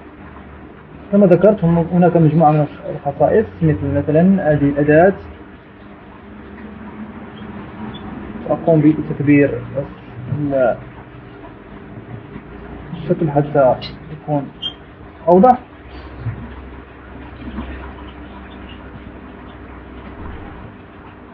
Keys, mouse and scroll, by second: 4.9 click, 6.8 click, 8.4 click, 11.2-12.0 alt+scroll down 2, 12.1 ctrl+alt+scroll up 2, 13.2 ctrl+scroll up 2, 18.2-18.5 shift+scroll down 2, 20.6 click.